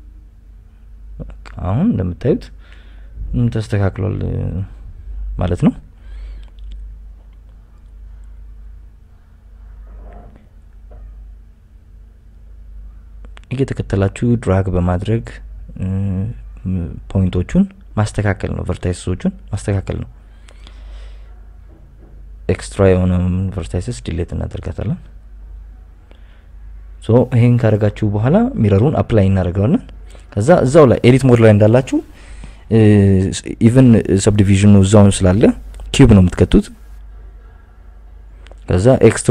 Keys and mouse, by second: 0.8 s, 1.0 y, 2.5 right click, 2.9 g, 3.6 click, 5.5 Tab, 6.6 Tab, 7.8 right click, 8.3 g, 9.6 click, 10.8 right click, 12.8 g, 12.9 g, 14.5 click, 15.7 shift+right click, 16.3 g, 16.4 g, 17.5 right click, 18.1 g, 18.2 g, 19.7 g, 19.9 g, 20.6 click, 22.1 right click, 22.9 g, 23.8 x, 24.8 right click, 25.3 g, 26.7 Tab, 28.7 a, 30.3 Tab, 30.8-31.2 drag, 31.9 Tab, 32.4 shift+s, 33.6 shift+a, 35.0 s, 36.5 click, 36.9 g, 37.1 z, 37.3 y, 38.6 KP_Add, 38.8 KP_Add, 39.2 KP_Add.